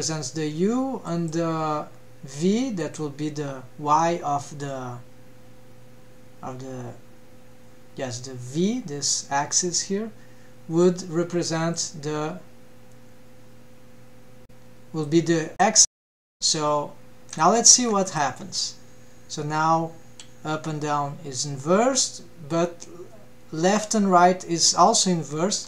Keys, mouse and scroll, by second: 1.0-2.9 drag, 11.7-15.9 drag, 17.3 click, 17.9 ctrl+Tab, 18.0 click, 18.4 g.